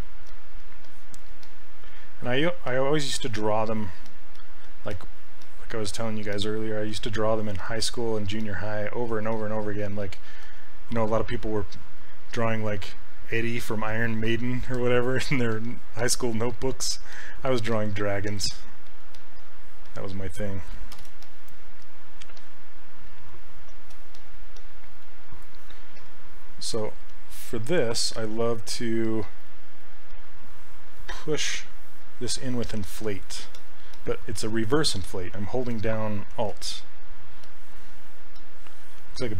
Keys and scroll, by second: 0.3 s, 9.3 s, 21.0 shift+f, 28.6 s.